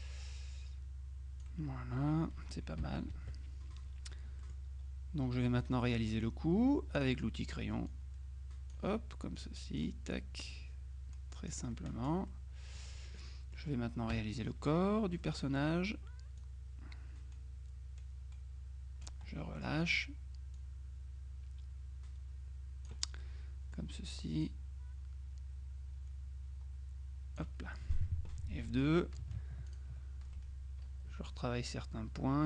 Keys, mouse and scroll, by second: 3.1 KP_Subtract, 4.5 click, 5.5-6.6 middle drag, 7.1 click, 8.0-9.3 drag, 9.3 middle click, 9.5-10.4 drag, 10.6-12.1 drag, 11.8 right click, 12.4 middle click, 13.4 middle click, 14.2 KP_Subtract, 15.3 click, 16.5-19.6 drag, 19.4 middle click, 20.7-23.5 drag, 23.3 middle click, 24.5-28.0 drag, 28.7 F2, 29.8 ctrl+click.